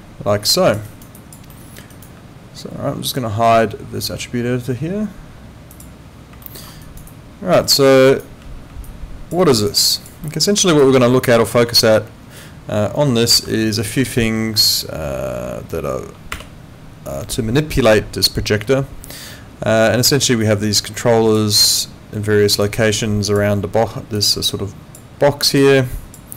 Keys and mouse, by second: 0.8 alt+right click, 1.1 alt+click, 1.5 alt+middle click, 1.9 alt+right click, 5.7 click, 6.4 alt+middle click, 6.8 alt+right click, 7.1 alt+click, 7.6 alt+right click, 8.9 alt+click, 9.4 alt+right click, 9.7 alt+click, 10.2 alt+middle click, 10.8 alt+click, 13.3 ctrl+2.